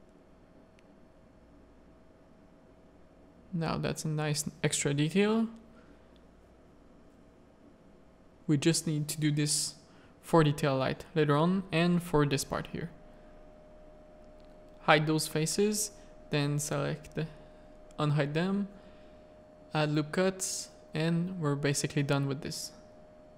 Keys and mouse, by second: 0.7 middle click, 1.9-4.7 middle drag, 5.4 middle click, 6.4 middle click, 7.8 middle click, 9.1 middle click, 9.9 click, 10.3 z, 10.6 shift+middle click, 11.1 z, 11.7 Tab, 12.0 middle click, 12.5 z, 12.7 a, 12.9 middle click, 13.3 3, 13.8 alt+click, 14.3 z, 15.3 h, 16.2 l, 17.1 alt+h, 18.4 Tab, 18.8 alt+a, 19.2 Tab, 19.4 ctrl+r, 21.0 Tab, 21.2 click, 21.8 ctrl+Tab, 22.0 ctrl+r, 23.0 Tab.